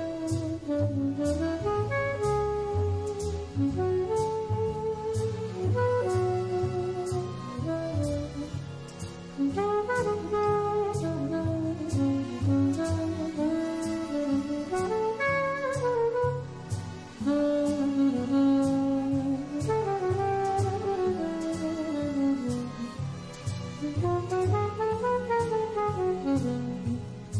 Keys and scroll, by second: 0.0 super+z, 24.6 super+c.